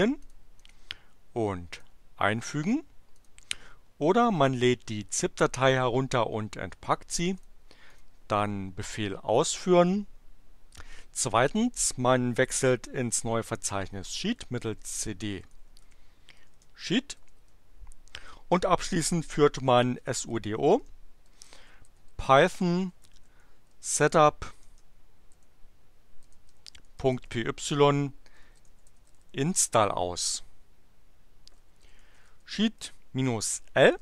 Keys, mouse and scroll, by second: 0.2 click, 0.6 right click, 1.7 click, 3.3 click, 7.5 click, 7.9 click, 8.8 Return, 14.0-17.2 typing, 17.3 Return, 19.5-29.5 typing, 29.6 Return, 31.3-33.2 typing, 33.9 Return.